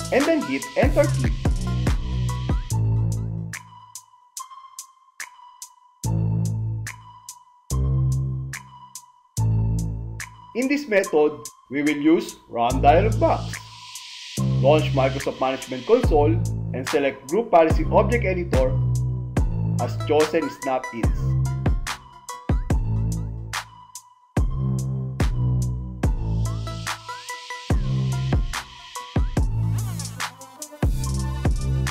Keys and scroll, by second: 13.5 super+r, 18.7 Return, 22.6 Left, 24.1 space, 27.3 ctrl+m, 29.3 g.